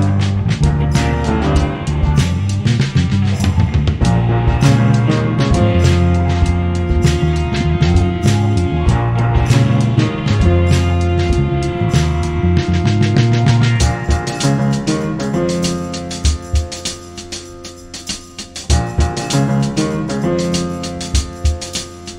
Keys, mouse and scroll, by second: 0.1 ctrl+s, 1.5 middle drag, 3.0 shift+d, 3.3 z, 3.5 z, 3.6 g, 4.8 r, 5.8-7.2 typing, 10.6 Tab, 12.1 ctrl+z, 12.5 ctrl+z, 13.5 ctrl+z, 14.0 g, 14.6 g, 16.2 middle click, 17.1 g, 19.2 g, 19.5 s, 20.5 ., 21.3 s.